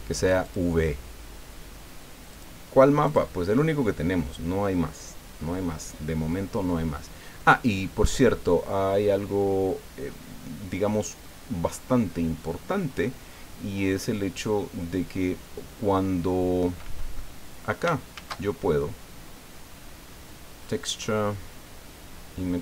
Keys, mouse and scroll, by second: 0.4 click, 2.3 click, 3.0 click, 15.7 scroll down 2, 16.4 scroll down 2, 17.1 click, 18.1 shift+a.